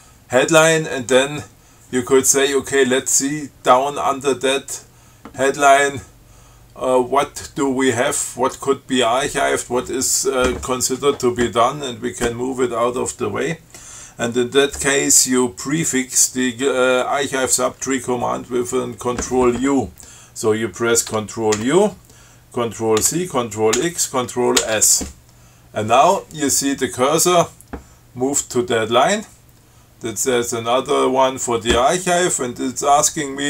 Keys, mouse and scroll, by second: 21.8 ctrl+u, 23.3 ctrl+c, 24.0 ctrl+x, 24.8 ctrl+s.